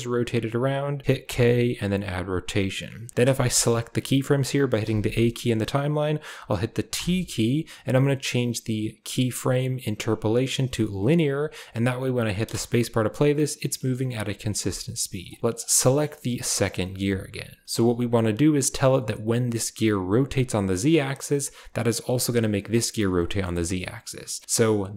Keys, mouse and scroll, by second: 1.1 k, 3.1 a, 3.3 a, 4.7 a, 4.9 a, 5.2 click, 6.9 t, 12.3 space, 13.5 click, 14.1 a, 14.3 a, 14.5 s, 15.4 s, 15.8 click, 16.1 shift+click, 16.4 shift+click, 16.8 shift+drag, 17.6 shift+click, 20.8-21.1 shift+middle drag, 23.1 shift+middle drag.